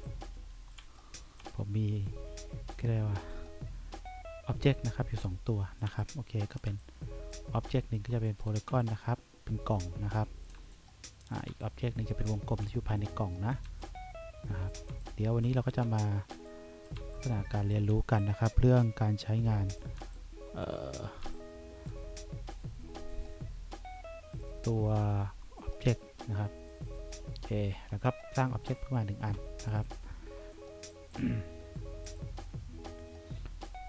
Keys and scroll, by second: 0.0 1, 0.9 3, 6.0 3, 6.8 2, 8.8 3, 10.7 2, 11.6 1, 12.4 3, 13.8 2, 15.1 1, 16.4 2, 17.1 1, 18.0 3, 20.2 2, 21.4 1.